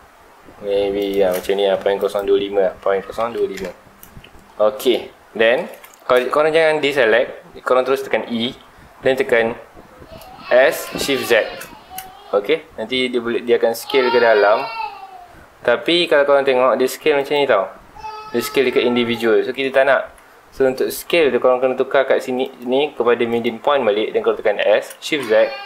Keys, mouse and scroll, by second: 1.1 shift+click, 2.0-3.6 drag, 3.6 KP_Enter, 4.6 scroll down 1, 4.9-5.3 scroll up 2, 5.3-7.8 middle drag, 7.8-8.4 scroll up 2, 8.4 e, 17.3 click, 19.9 ctrl+z, 20.9-24.6 drag, 24.6 s.